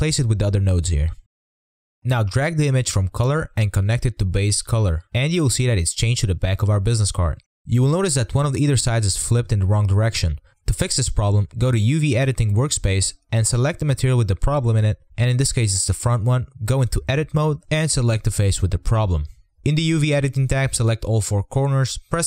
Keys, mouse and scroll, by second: 0.0-1.0 drag, 3.8-7.1 drag, 7.1-8.7 middle drag, 9.0 Tab, 9.1 click, 9.2 scroll down 3, 9.3-9.6 scroll up 2, 9.6 click, 9.8 click, 9.9 scroll down 1, 10.0 middle click, 10.1 r, 10.4 r, 10.8-11.8 drag, 14.1 click, 16.4 a, 16.9 middle click, 17.1 scroll up 8, 17.3 middle click, 17.7 z, 17.8 middle click, 18.4 a, 18.9 r.